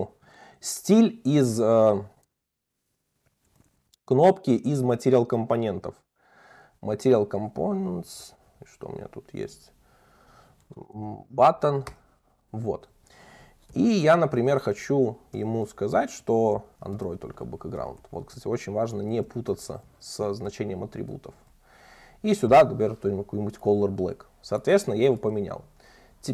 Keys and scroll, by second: 3.0 alt+Up, 12.0 Return, 16.7 Return, 20.5 Return, 25.4 alt+Up, 25.9 super+c.